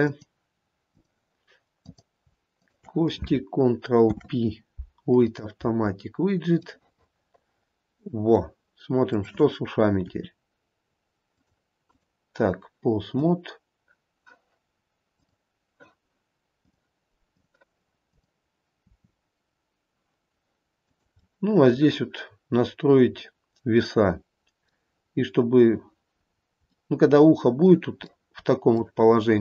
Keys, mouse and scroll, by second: 0.3 click, 2.0 click, 2.8 shift+click, 4.2 ctrl+p, 6.9 middle click, 7.0 middle click, 7.2 middle click, 7.5 middle click, 9.4 click, 10.3 r, 12.1 click, 13.3 click, 16.8 click, 19.6 r, 21.4 middle click, 22.5 middle click, 22.7-23.2 scroll up 1, 23.4 middle click, 26.4-27.0 scroll down 2, 26.8 middle click, 27.0 middle click, 28.7 middle click.